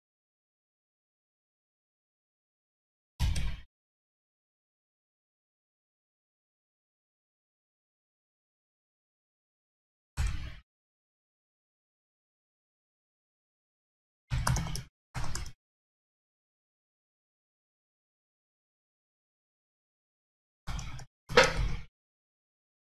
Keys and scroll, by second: 1.2 super+c, 4.7 super+v.